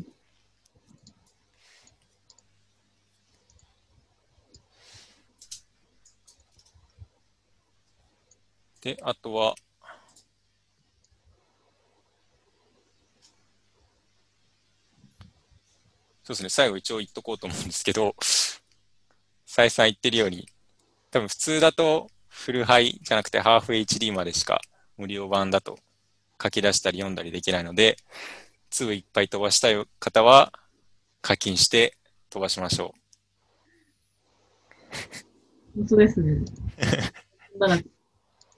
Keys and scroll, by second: 6.5 alt+Tab.